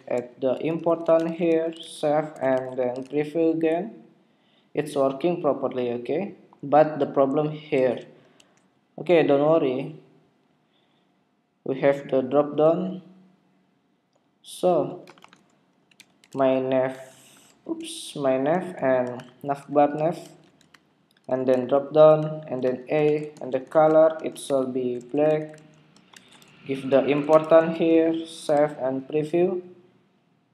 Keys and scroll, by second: 2.3 super+Tab, 3.0 super+r, 8.3 super+Tab, 21.7 super+v, 27.8 super+s, 28.5 super+Tab, 29.2 super+r.